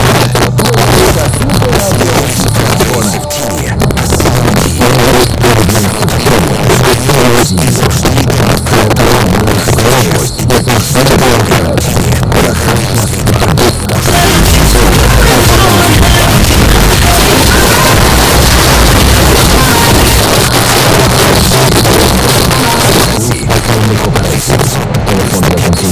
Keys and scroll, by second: 20.1 Page_Down.